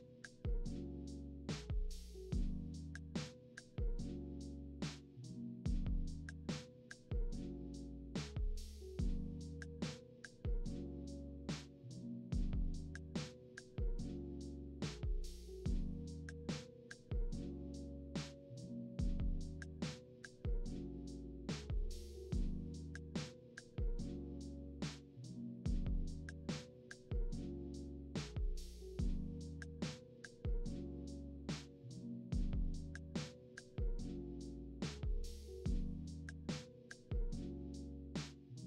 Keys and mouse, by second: 0.0 middle click, 0.9 click, 2.2 middle click, 2.2 click, 3.4 shift+d, 4.6 middle click, 4.7 click, 5.0-7.7 middle drag, 7.7 click, 8.6 middle click, 8.7 click, 9.4-12.3 middle drag, 12.3 click, 13.9 middle click, 13.9 click, 14.4 right click, 14.5 click, 14.7 right click, 14.9 middle click, 15.4 middle click, 15.5 right click, 16.4 z, 19.3 alt+d, 19.8 ctrl+middle click, 20.8 Tab, 21.6-24.0 middle drag, 22.3 `, 26.0 ctrl+z, 26.4 Escape, 27.0 Tab, 27.3 ctrl+z, 27.5 ctrl+z, 27.8 ctrl+z, 28.0 ctrl+z, 28.1 ctrl+z, 28.2 ctrl+z, 29.7 shift+d, 30.2 ctrl+middle click, 31.3 Tab, 31.3 click, 32.2-35.2 middle drag, 35.4 Tab, 35.4 middle click, 35.8-38.6 drag, 36.1 z, 37.4 alt+h.